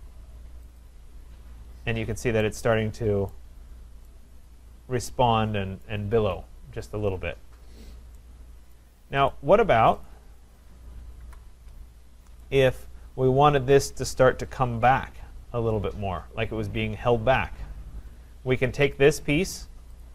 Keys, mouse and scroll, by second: 0.8 click, 1.3-2.6 scroll, 2.6-3.3 scroll, 3.3 right click, 3.7 scroll, 5.9 right click, 6.8 scroll, 7.8-8.2 scroll, 8.7 right click, 9.3 click, 10.1 click, 11.2 Delete, 12.8 right click, 18.9 click, 20.0 click.